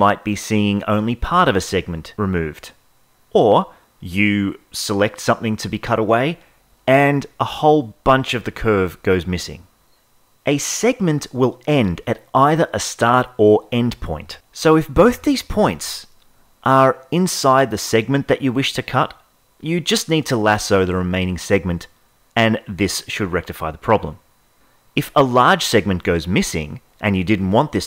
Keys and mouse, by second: 0.6 click, 3.9 ctrl+z, 4.0-7.5 drag, 10.4-11.9 drag, 12.2 click, 13.6-14.8 drag, 15.3 click, 19.1 Tab, 20.5-21.8 drag, 22.7-23.8 drag, 24.5 Tab.